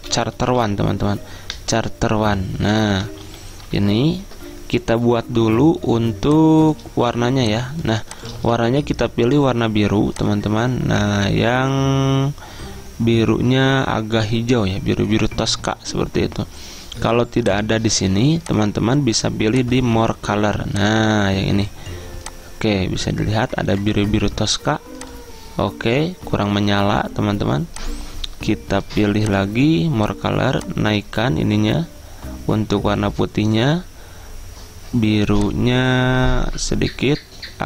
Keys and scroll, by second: 1.8 typing, 2.8-3.9 typing, 3.9 ctrl+], 8.4 ctrl+a.